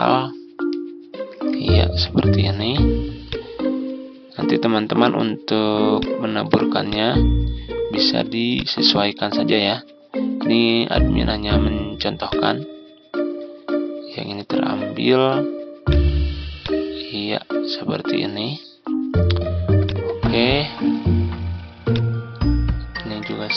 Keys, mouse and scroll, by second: 0.5 click, 1.2 Delete, 2.3 ctrl+scroll up 1, 3.1-5.4 drag, 6.8-21.4 drag.